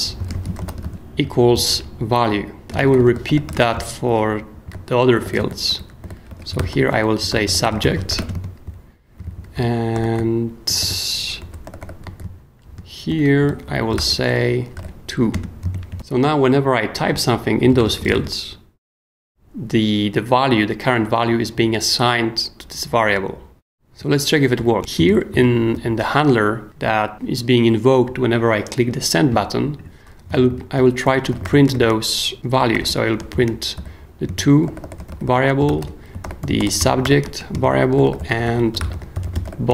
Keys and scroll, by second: 0.0-1.3 typing, 1.5 super+s, 2.4-15.3 typing, 8.6 super+k, 17.4-18.6 typing, 24.6 i, 24.8 Return, 25.3 super+k, 25.7 w, 30.5 super+k, 30.5-39.7 typing, 34.3 shift+super+;, 34.3 super+Escape, 37.9 shift+super+y.